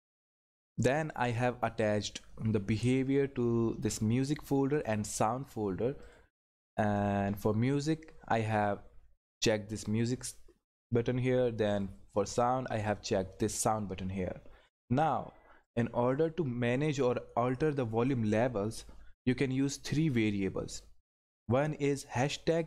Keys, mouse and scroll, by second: 0.8 click, 11.7 click, 15.0 click.